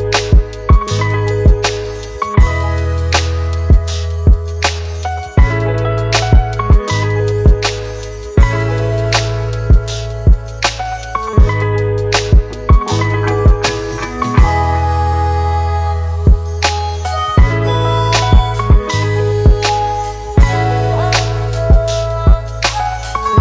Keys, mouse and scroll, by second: 15.1 double click.